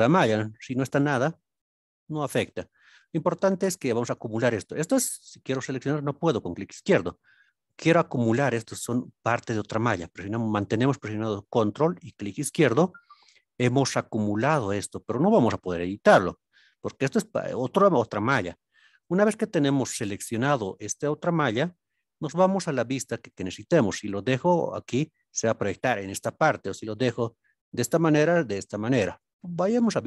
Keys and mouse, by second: 0.1 a, 1.3-1.6 middle drag, 2.1-2.9 middle drag, 6.1 click, 12.1 ctrl+click, 23.7-25.1 middle drag, 26.4-27.8 middle drag.